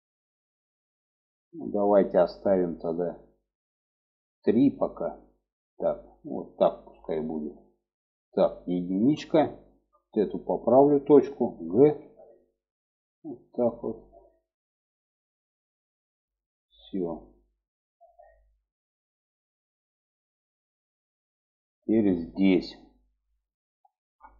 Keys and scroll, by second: 8.4 1, 11.2 g, 24.0 1.